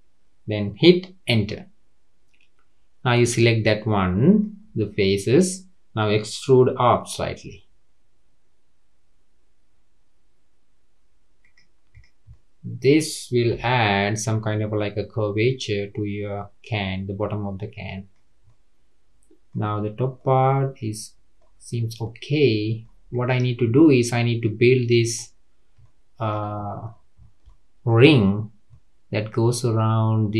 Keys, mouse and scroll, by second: 3.6 middle click, 4.6-4.9 scroll down 3, 4.9-7.8 middle drag, 7.8 e, 11.9 click, 12.3-13.5 middle drag, 13.5 Tab, 13.9-17.0 middle drag, 18.4-19.5 middle drag, 19.5-20.2 scroll up 3, 20.2-21.5 middle drag, 21.5-22.0 scroll down 2, 22.0-23.1 middle drag, 23.1 click, 24.3-24.9 middle drag, 24.9-25.7 scroll up 3, 25.7 scroll up 1, 25.8-26.5 shift+middle drag, 26.5-26.9 scroll up 4, 26.9-27.4 scroll down 10, 27.4-30.3 shift+middle drag.